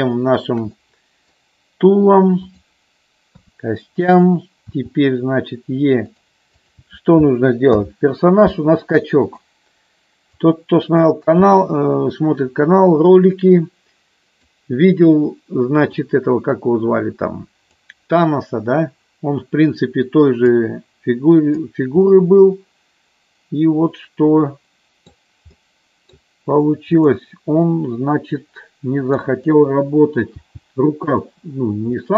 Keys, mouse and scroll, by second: 0.1 shift+middle click, 0.8 middle click, 2.4 click, 3.4 KP_3, 4.6 e, 6.0 click, 7.7 alt+p, 10.4 click, 11.5 KP_1, 13.3-14.4 drag, 15.9-17.6 drag, 20.5 click, 22.0-25.1 middle drag, 25.5 middle click, 26.9 click, 27.7-29.2 middle drag, 30.4 g, 31.1 click, 32.0 middle click.